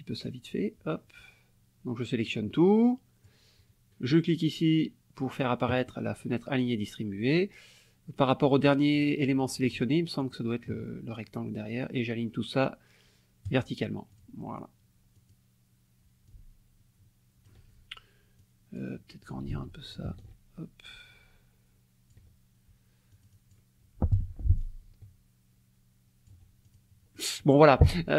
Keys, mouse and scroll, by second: 2.3 click, 5.2 click, 7.3 click, 9.7 shift+click, 10.2 shift+click, 13.5 click, 14.1 click, 15.1 click, 16.2-17.6 ctrl+drag, 18.4 click, 19.5 ctrl+z, 20.1 ctrl+shift+z, 20.2 ctrl+shift+click, 23.1 click, 24.1 F1, 24.6-26.5 ctrl+drag, 26.6 ctrl+click, 27.1 ctrl+click.